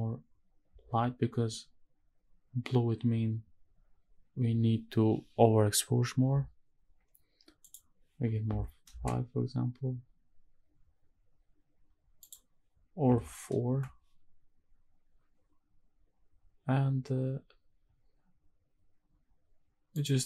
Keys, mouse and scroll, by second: 7.6-8.9 drag, 12.2-13.7 drag, 19.9-20.2 drag.